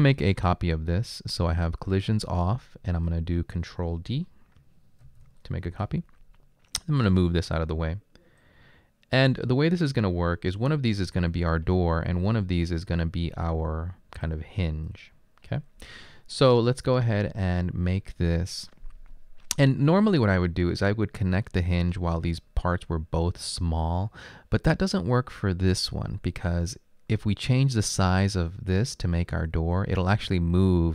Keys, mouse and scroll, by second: 5.1 ctrl+d.